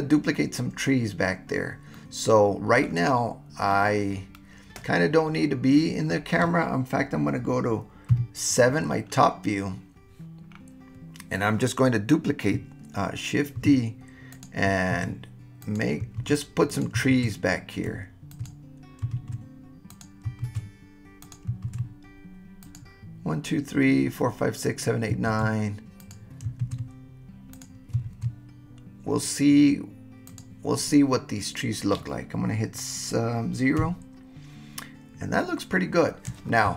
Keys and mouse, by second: 1.9-2.9 middle drag, 3.7-6.1 middle drag, 8.1 KP_7, 13.6 shift+d, 14.3 click, 14.9 shift+d, 15.6 click, 16.2 shift+d, 16.7 click, 17.1 shift+d, 18.3 shift+click, 19.2 shift+d, 19.9 click, 20.5 shift+d, 21.2 click, 21.6 shift+d, 22.6 click, 25.3 shift+d, 26.0 click, 26.7 shift+d, 27.6 click, 28.1 shift+d, 30.3 click, 33.8 KP_0.